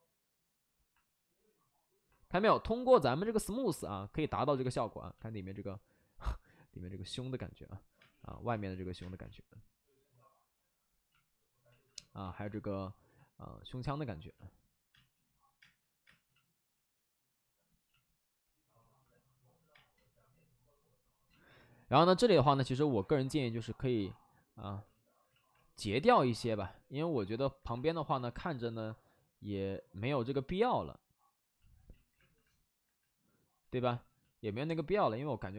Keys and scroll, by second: 4.6 space, 7.9 space, 8.4 space, 8.9 space, 11.7 alt+s, 12.2 alt+s, 14.8 space, 15.5 space, 16.5 space, 19.7 space, 25.2 ctrl+z, 31.8 ctrl+z, 33.8 space.